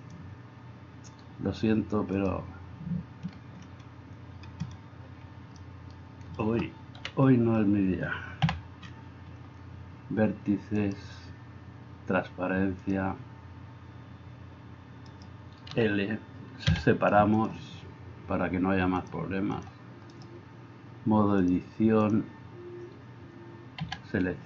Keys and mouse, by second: 7.0 KP_1, 8.5 a, 15.1 middle click, 15.1 right click, 16.7 l, 16.7 p, 20.1 middle click, 20.1 right click, 23.8 a.